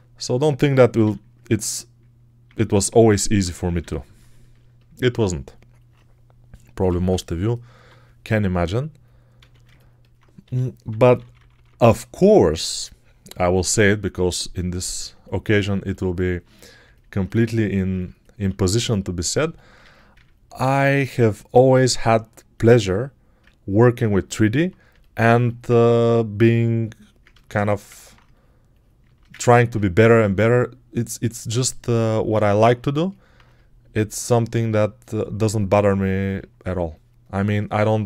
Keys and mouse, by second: 0.9 ctrl+e, 6.6 m, 6.9-7.7 [, 9.2 a, 10.3-11.5 typing, 15.4 alt+right click, 15.7 ctrl+alt+right click, 16.1 alt+right click, 18.3 1, 19.7 a.